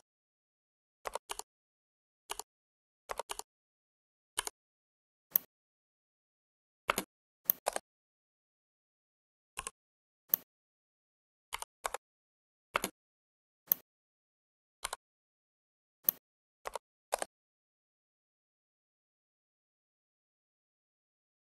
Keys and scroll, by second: 1.1 ctrl+w, 2.1 w, 3.1 ctrl+w, 6.9 space, 11.4 5, 11.8 Return, 12.6 space.